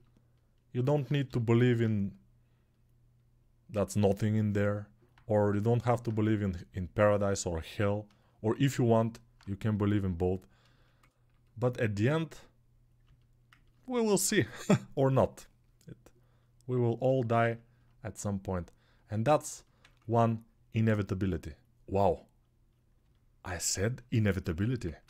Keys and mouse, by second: 1.0 g, 2.2-14.0 drag, 14.0-16.8 right drag, 14.2 3, 19.8-24.6 alt+drag, 24.6-25.0 ctrl+alt+right drag.